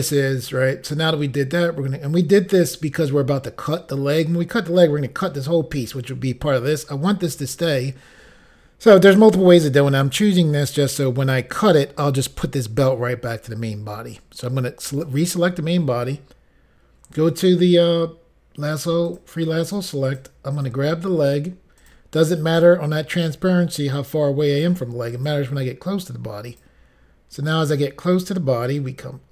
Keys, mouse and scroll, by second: 14.9 click, 19.1 click, 19.7 click, 20.1 click, 20.6 click, 21.8 click, 25.2 click, 26.5 click, 27.5 click, 28.7 click.